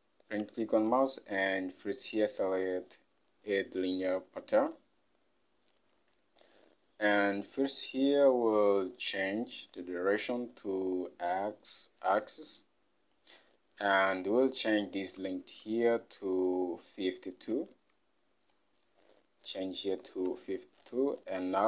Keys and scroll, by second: 15.5 ctrl+Tab, 19.9-20.9 typing.